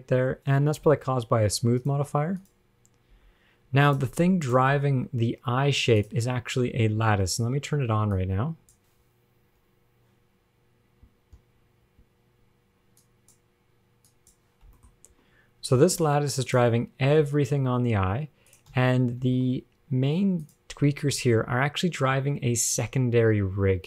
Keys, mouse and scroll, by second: 0.0-0.4 scroll down 3, 1.1 g, 2.6 click, 3.4 g, 4.7 click, 5.4 g, 8.4 click, 9.3-9.9 scroll down 6, 10.1-11.3 scroll up 1, 11.3-12.9 scroll up 8, 13.2 click, 14.3 click, 15.0 shift+middle click, 15.1 scroll up 4, 16.7 click, 17.4 g, 19.0 a, 19.5 alt+r, 19.5 alt+g, 20.7 click, 21.3 g.